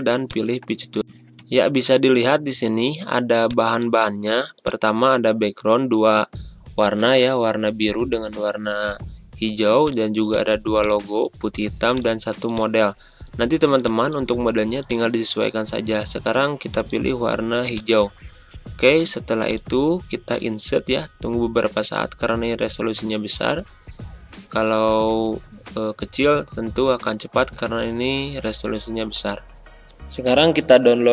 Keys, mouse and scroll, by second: 1.0 Pause, 3.4 click, 19.6 click, 21.8 click.